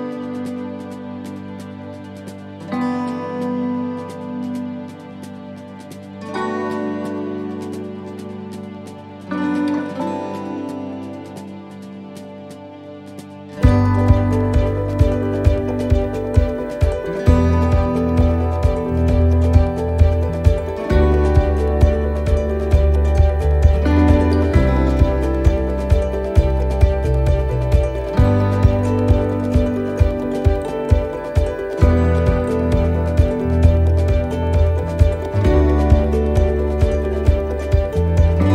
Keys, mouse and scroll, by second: 0.6 shift+middle click, 3.5 shift+middle click, 21.5 right click, 23.2 click, 25.2 right click, 26.3 l, 27.5 shift+d, 28.7 s, 30.3 click, 35.3 click, 35.3 s.